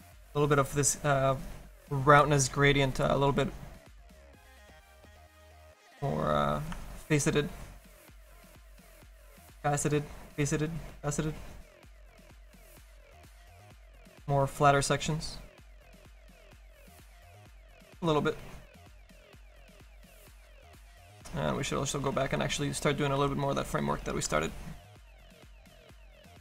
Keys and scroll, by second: 23.3 s.